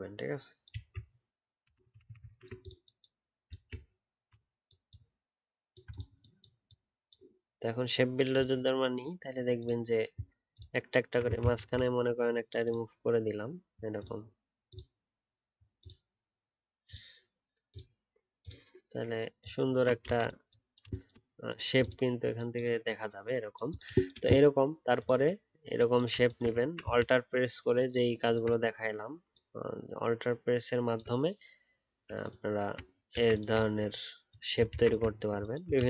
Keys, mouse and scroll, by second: 1.6 ctrl+d, 1.8 ctrl+d, 1.9 ctrl+d, 2.1 ctrl+d, 2.2 ctrl+d, 3.5 alt+click, 4.8 alt+click, 5.8 alt+click, 9.1-9.5 alt+scroll up 1, 9.5 alt+click, 11.4 ctrl+z, 12.6 alt+scroll up 2, 12.6 alt+click, 12.8 alt+scroll down 1, 13.9 alt+click, 19.6 alt+scroll down 1, 26.6 scroll down 1, 27.9 alt+click, 29.3 alt+click, 32.2 alt+click, 33.6 alt+scroll up 1, 34.6-35.0 alt+scroll, 35.0-35.7 alt+scroll down 2, 35.7-35.8 alt+scroll.